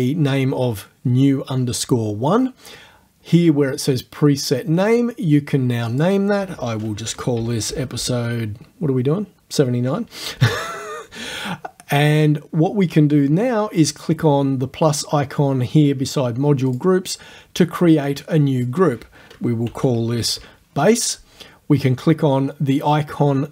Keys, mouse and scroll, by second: 4.9-6.2 drag, 7.1 shift+e, 7.4 shift+p, 7.7 shift+space, 8.0 shift+0, 10.4 9, 16.7 click, 18.1 click, 19.5-20.9 typing.